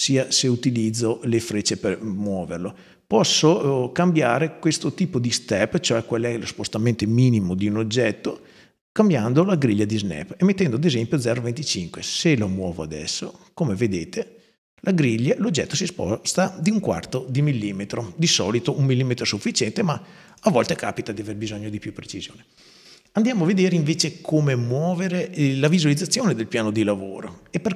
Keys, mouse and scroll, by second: 0.8 click, 9.2 click, 10.7 click, 12.0-13.2 drag, 18.4 click, 20.1 click.